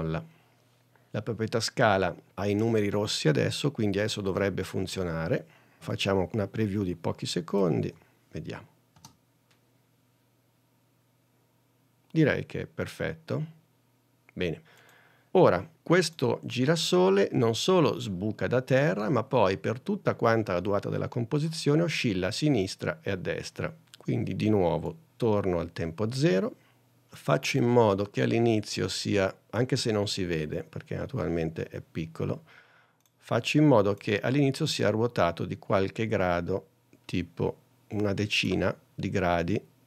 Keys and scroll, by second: 7.9 n, 9.0 space.